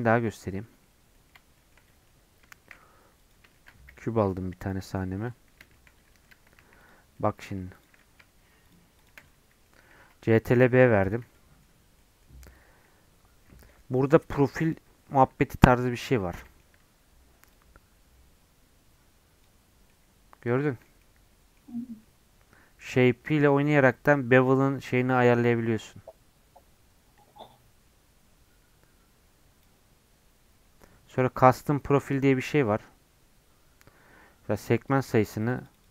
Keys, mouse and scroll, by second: 0.3 middle click, 1.3 scroll down 2, 1.5-2.5 shift+middle drag, 2.5 shift+a, 3.5 shift+middle click, 3.8 g, 4.9-6.3 shift+middle drag, 6.3 Tab, 6.6 2, 6.8 click, 7.1 middle click, 7.7 shift+click, 8.0 middle click, 8.6 shift+click, 9.3 middle click, 9.9 ctrl+b, 12.0-16.1 middle drag, 16.1 scroll up 2, 16.4-17.5 middle drag, 17.5-19.9 drag, 19.9 middle click, 20.5 shift+scroll down 2, 20.7-23.0 shift+middle drag, 23.0-26.0 drag, 31.1-34.1 drag, 34.9-35.9 drag.